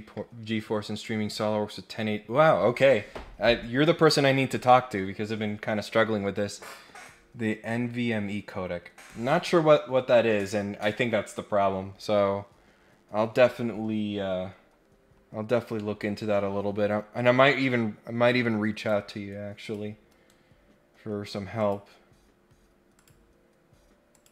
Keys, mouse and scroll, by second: 14.3 scroll down 3, 14.5-15.6 scroll up 8, 15.7 middle click, 16.2 scroll down 2, 16.9 scroll down 1, 17.5 scroll up 1, 18.8 click, 19.6 click, 21.6 click, 22.9 click, 24.1 click.